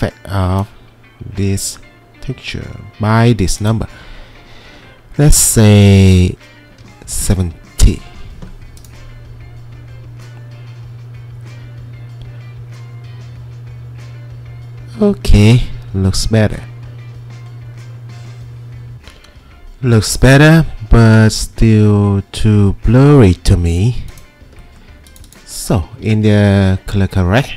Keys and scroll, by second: 6.7-7.2 typing, 7.7 Return, 11.7 typing.